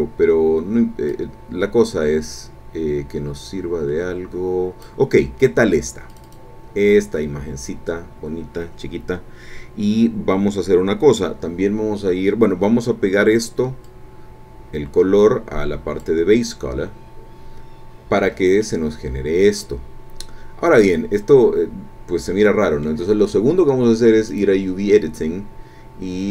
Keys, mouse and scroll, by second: 1.1-5.0 drag, 6.1 click, 13.8-16.2 drag, 18.6-23.0 drag, 24.3 click, 25.6-26.3 scroll down 2.